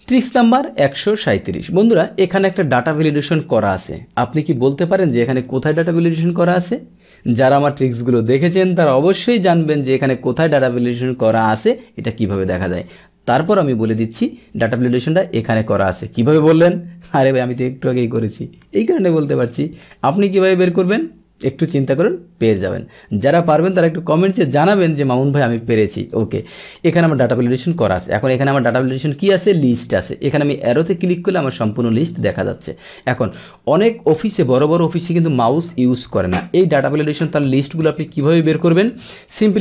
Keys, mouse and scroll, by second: 0.0 click, 26.9 click, 30.7 click, 32.1 click, 33.0 click, 36.7 click, 37.2 click, 37.4 right click, 37.9 right click, 38.5 click, 39.0 click.